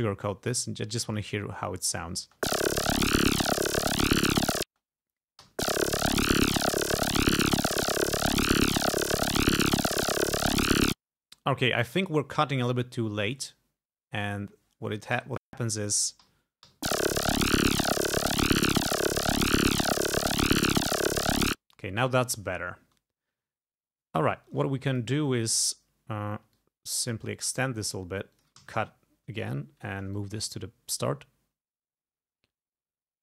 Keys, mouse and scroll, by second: 1.1 click, 2.2 space, 3.2 ctrl+scroll down 2, 4.7 space, 5.5 l, 10.9 space, 12.1 click, 12.6 click, 14.3 click, 15.2 Delete, 15.5 click, 16.3 ], 16.7 l, 21.5 space, 22.3 ctrl+click, 22.6-23.4 ctrl+scroll up 4, 24.4-24.7 ctrl+scroll up 2, 24.9 ctrl+click, 26.6-28.1 drag, 28.3 click, 28.6 s, 29.0 ctrl+scroll down 2, 30.2 ctrl+click.